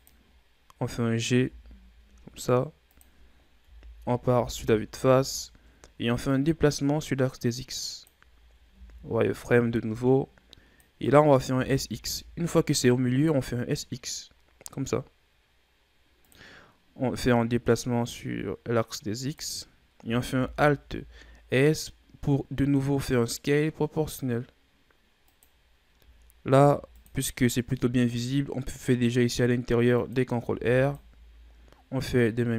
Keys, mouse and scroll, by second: 0.3-1.3 scroll up 2, 1.3 g, 3.6 KP_1, 4.3 z, 4.9-5.3 scroll down 2, 5.3-6.2 ctrl+scroll up 4, 6.2-8.3 drag, 8.3-8.7 ctrl+scroll up 5, 8.7 z, 9.2-9.7 scroll up 1, 9.9-11.5 drag, 11.5 s, 17.2-20.1 drag, 20.1 alt+s, 26.5 ctrl+r, 30.5 ctrl+r.